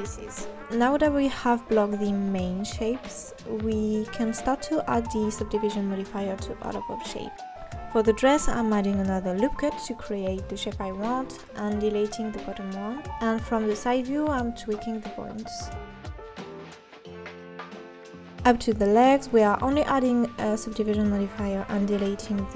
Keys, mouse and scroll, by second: 0.2-2.2 drag, 2.2 scroll down 1, 2.4 KP_3, 2.6 Tab, 4.4 Tab, 4.5 KP_1, 4.8 Tab, 5.1 click, 5.5 x, 6.1 Tab, 6.6 click, 7.1-8.6 drag, 8.8 click, 9.1-9.5 scroll up 1, 9.5 click, 9.7 scroll down 2, 9.7 Tab, 10.1-11.2 drag, 11.2 s, 12.1-13.1 drag, 13.3 x, 13.9 Tab, 14.2 KP_3, 14.4 KP_1, 14.5 Tab, 14.6 KP_3, 15.1 click, 15.9 click, 16.0 click, 16.1-18.3 typing, 16.8 click, 17.2 click, 17.8 click, 18.8-21.1 drag, 21.1 scroll down 1, 21.3 Tab, 21.9 x, 22.4 Tab.